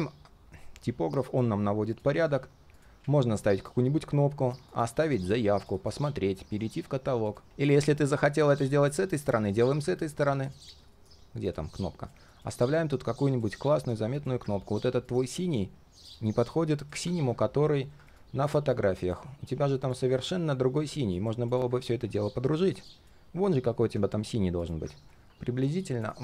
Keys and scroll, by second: 10.9 ctrl+shift+[.